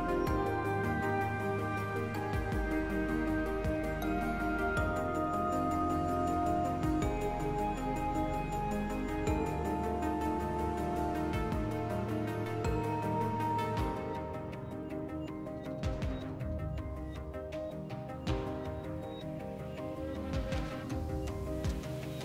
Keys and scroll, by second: 5.4 s, 7.1 s, 8.5 2.